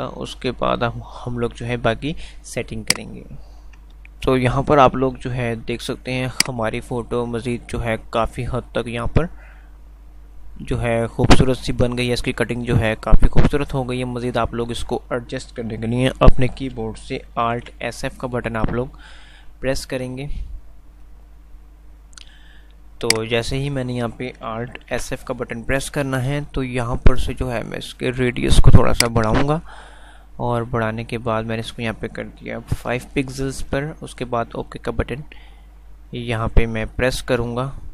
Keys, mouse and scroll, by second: 3.1 shift+click, 6.8 shift+click, 23.2 shift+click.